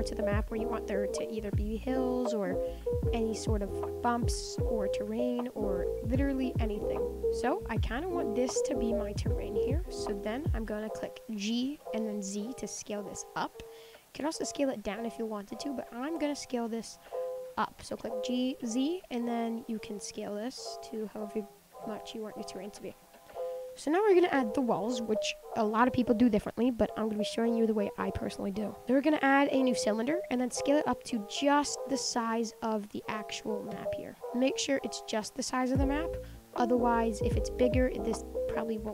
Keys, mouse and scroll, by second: 0.7 shift+click, 1.8 shift+click, 3.3 shift+click, 4.3 shift+click, 5.1 shift+click, 6.1 shift+click, 7.2 middle click, 8.1 shift+click, 8.6 scroll up 3, 8.8-10.1 middle drag, 10.1 shift+click, 10.8 scroll up 1, 10.8 middle click, 11.6 g, 14.9 Tab, 15.1-15.4 middle drag, 15.4 Tab, 16.0 ctrl+z, 17.0 ctrl+z, 17.4 ctrl+z, 18.3 g, 20.2 Tab, 20.5-21.4 middle drag, 21.4-21.9 scroll down 5, 21.9-22.5 middle drag, 22.5 click, 22.8-25.9 middle drag, 28.8 shift+a, 30.0-31.0 middle drag, 31.0 s, 34.2-37.1 middle drag, 37.5-37.8 scroll up 1, 37.8-38.5 scroll down 5, 38.5-38.9 scroll up 4.